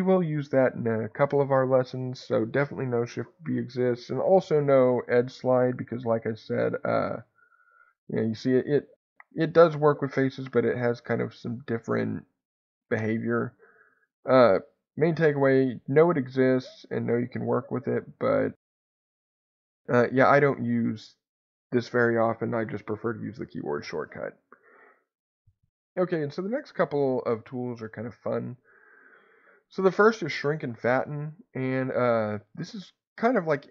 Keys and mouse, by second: 6.5-13.0 drag, 13.0 Escape, 14.0 click, 15.0 2, 15.1 click, 17.5-20.3 drag, 20.3 Escape, 28.5 click, 31.1 a.